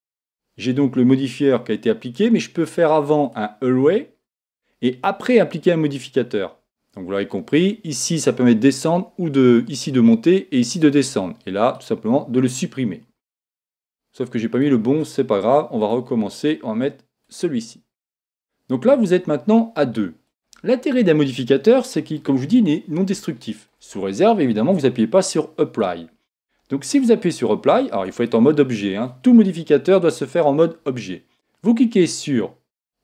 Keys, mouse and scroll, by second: 3.2 click, 11.7 click, 14.5-17.6 drag, 18.4-20.2 middle drag, 20.2 click, 21.8-25.1 middle drag, 27.9 Tab, 32.9 click.